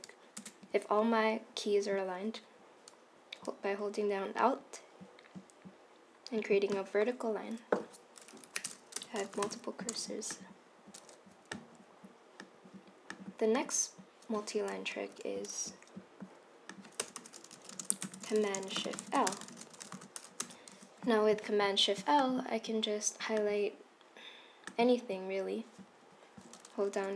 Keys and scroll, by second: 8.6 Right, 9.1 BackSpace, 9.5 shift+y, 15.1 super+c, 17.1 Return, 17.2 Return, 17.3-20.5 typing, 20.8 super+v.